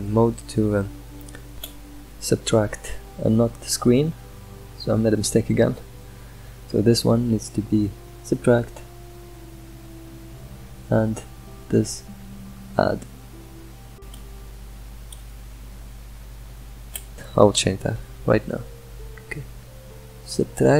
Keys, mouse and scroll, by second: 3.0 scroll up 2, 3.6-10.0 drag, 11.4 middle click, 11.9-20.7 drag.